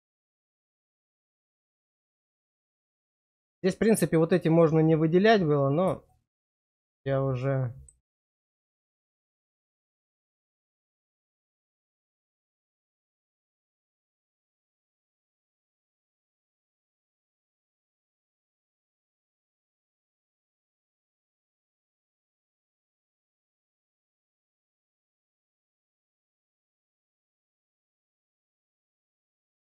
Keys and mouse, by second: 2.1 click, 6.0 shift+click, 7.4 click, 8.3 shift+click, 8.7 click, 9.9 click, 11.5 shift+click, 11.9 middle click, 13.0 shift+click, 13.4 shift+click, 15.9 middle click, 17.1 shift+middle click, 18.6 click, 19.4 click, 20.0 click, 20.8 shift+click, 21.7 shift+click, 22.2 middle click, 24.0 shift+click, 25.6 middle click, 28.7 shift+click.